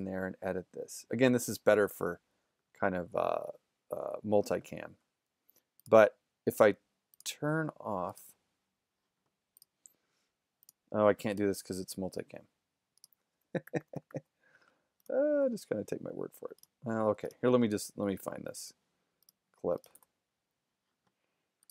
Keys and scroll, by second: 13.7 super+=, 17.1 super+z, 20.0 shift+f.